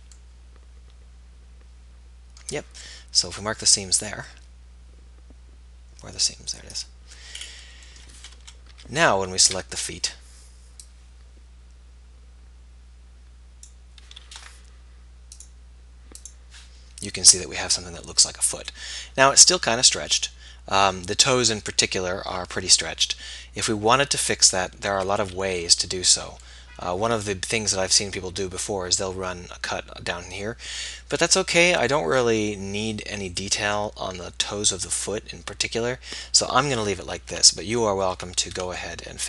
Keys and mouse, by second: 8.4 KP_1, 8.8 z, 9.5 b, 35.6-37.3 middle drag, 37.3 Tab, 38.4 Tab.